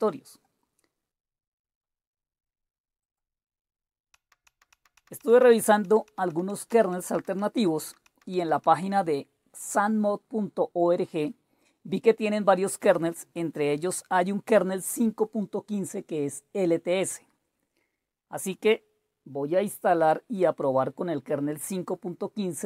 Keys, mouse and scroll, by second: 0.4-1.5 drag, 1.7 click, 3.0 click, 4.1 Down, 4.5 Down, 4.7 Down, 5.0 Down, 5.2 Down, 5.4 Down, 5.6 Down, 5.9 Down, 6.1 Down, 6.3 Down, 6.5 Down, 6.7 Down, 7.0 Down, 7.1 Down, 7.4 Down, 7.6 Down, 7.9 Down, 8.1 Down, 8.2-8.9 typing, 9.8 click, 11.2 typing, 13.0-16.1 scroll down 1, 17.1-22.6 drag.